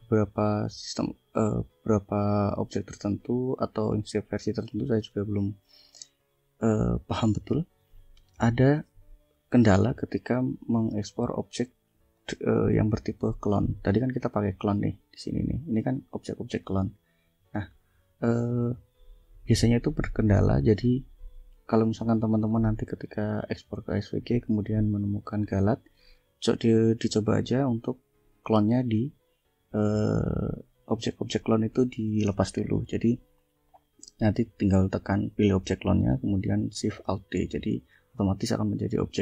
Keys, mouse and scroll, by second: 11.4 click, 12.1-13.3 drag, 13.5 click, 14.6 click, 15.5 ctrl+click, 16.0 ctrl+click, 17.7 ctrl+click, 19.6 click, 20.7 click, 22.4-22.8 scroll up 2, 23.8 click, 24.6 click, 25.3 scroll down 2, 25.8 click, 30.8 click.